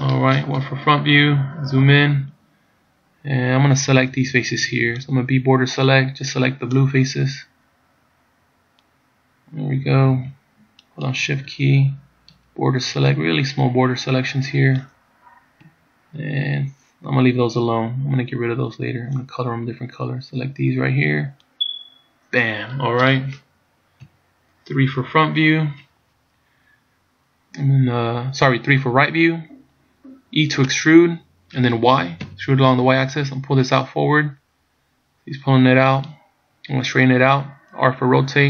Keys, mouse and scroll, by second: 0.7 KP_1, 1.5 scroll up 2, 5.3 b, 10.9 shift+right click, 12.4 b, 18.5 b, 24.1 KP_3, 30.8 e.